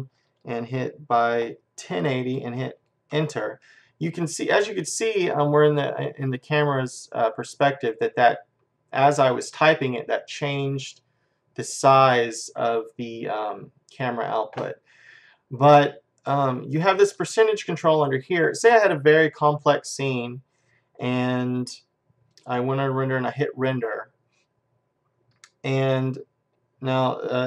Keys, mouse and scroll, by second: 22.4-25.1 drag.